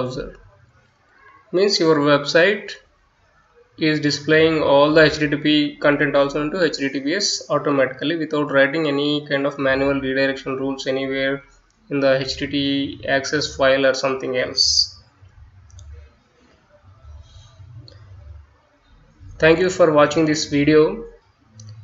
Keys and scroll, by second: 15.8 Return, 16.3-20.5 typing.